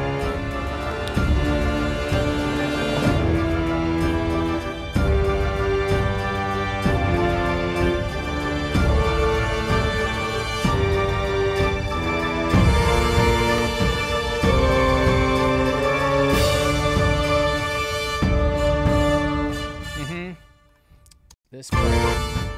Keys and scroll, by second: 19.6 space, 21.3 space.